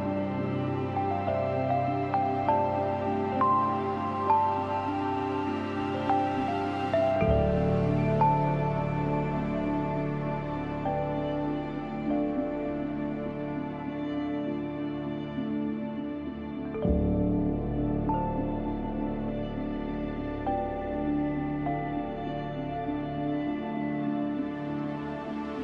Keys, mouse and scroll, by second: 0.0 space, 0.1 click, 0.4 space, 0.7 click, 3.9-6.9 drag, 6.9 space, 7.1 click, 7.4 space, 8.8 space, 10.8-15.0 drag, 15.1-25.6 drag.